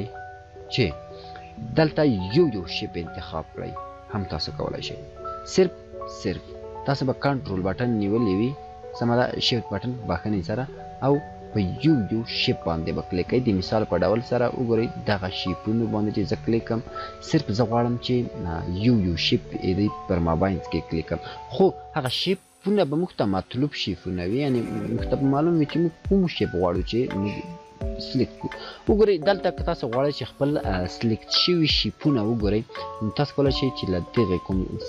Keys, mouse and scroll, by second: 1.6 click, 7.2 click, 8.0 ctrl+click.